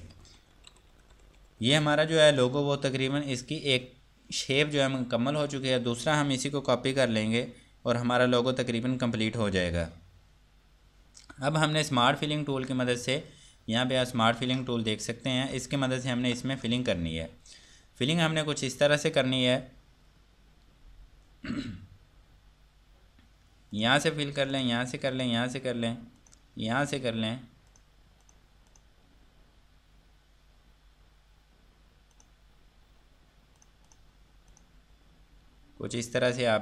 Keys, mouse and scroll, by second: 0.6 Escape, 0.9 F3, 1.6 F2, 2.0 click, 14.6 4, 16.5 ctrl+4, 16.8 click, 24.0 click, 27.0 scroll up 1, 29.3 scroll down 1, 32.4 click, 33.2 scroll up 1, 35.9 scroll down 1.